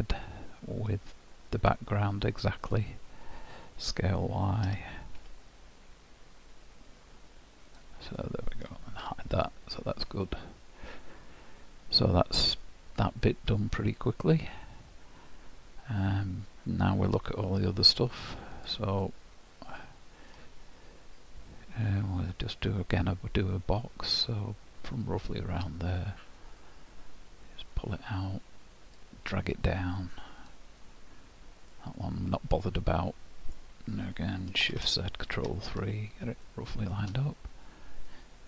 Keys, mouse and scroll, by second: 4.7 s, 8.2 middle click, 9.0 h, 9.5-10.0 scroll down 2, 10.3 middle click, 18.6 click, 19.0 middle click, 20.4-21.2 scroll down 1, 21.2-21.6 scroll up 2, 25.8 click, 31.7 middle click, 34.7 shift+z, 35.2 ctrl+KP_3, 36.5 shift+middle click, 37.2-37.7 scroll up 5.